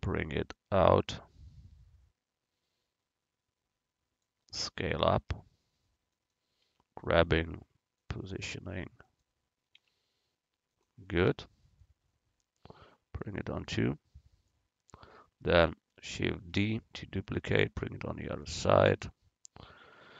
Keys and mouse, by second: 0.6-2.4 drag, 5.4 s, 6.7 g, 8.4 s, 9.8 g, 11.4 click, 13.0-15.0 drag, 16.5 shift+d, 17.3-19.1 drag.